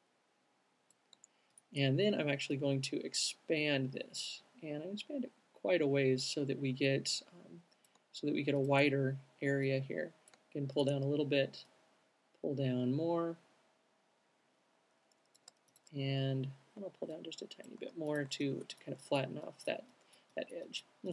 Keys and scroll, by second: 17.6 alt+shift+q.